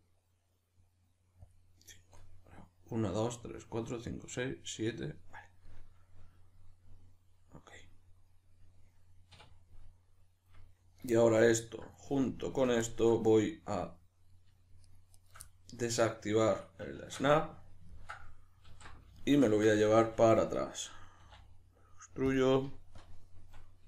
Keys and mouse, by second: 5.6-12.4 middle drag, 9.4 \, 12.4 alt+shift+right click, 12.8-14.8 shift+middle drag, 14.8 shift+right click, 15.1 shift+right click, 15.4-21.1 middle drag, 16.9 shift+Tab, 18.7 alt+q, 21.1 e, 22.4-23.8 drag.